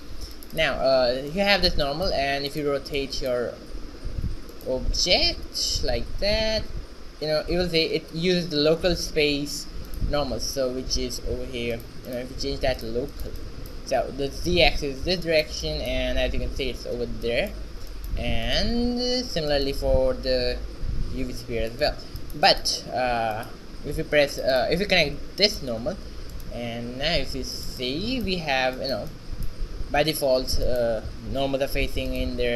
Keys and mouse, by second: 0.4 click, 1.4-2.6 middle drag, 2.6-4.5 right drag, 4.5 middle click, 4.6-6.6 right drag, 6.1 r, 11.4 shift+z, 11.8-13.2 drag, 15.1 shift+z, 18.6-21.5 right drag, 20.2 r, 22.3 middle click, 23.1 shift+z, 24.4-27.2 drag, 26.3 shift+z, 27.2 alt+r, 27.2 right click, 30.4 shift+z.